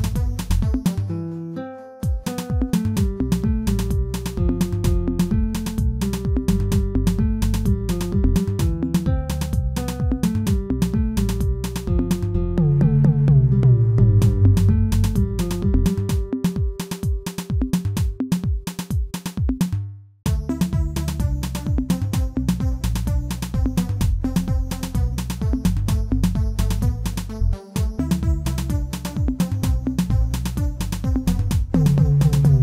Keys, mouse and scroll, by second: 1.5-4.5 drag, 8.7-9.4 scroll down 1, 9.4-11.5 drag, 11.5 s, 13.0 click, 13.8 s, 16.5 s, 18.2 click, 19.6-19.9 middle drag, 24.2-25.4 middle drag, 25.4 ctrl+r, 27.5-28.5 middle drag, 28.5 3, 30.2 alt+click, 30.9 alt+click, 31.6 middle click, 31.8 middle click.